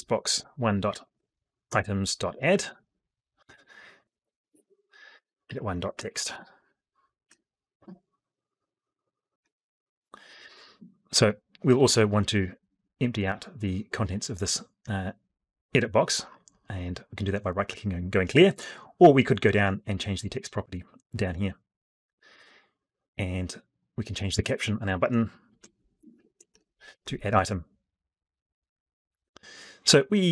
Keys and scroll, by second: 4.3 ctrl+space, 9.1 F12.